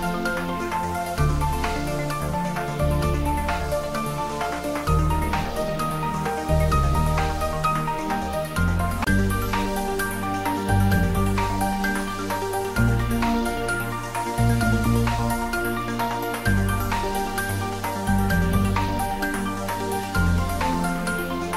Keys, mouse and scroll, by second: 0.0 shift+click, 3.0 middle click, 3.8 shift+middle click, 5.0 shift+z, 6.5 click, 8.4 click, 9.5 click, 10.4 ctrl+middle click, 10.8 ctrl+middle click, 11.2 click, 11.5 Tab, 11.8 ctrl+middle click, 12.6 ctrl+middle click, 12.9 shift+middle click, 13.2-14.8 ctrl+middle drag, 14.8 click, 16.2 click, 17.5 click, 18.3 scroll down 1, 19.5 click, 21.0 3.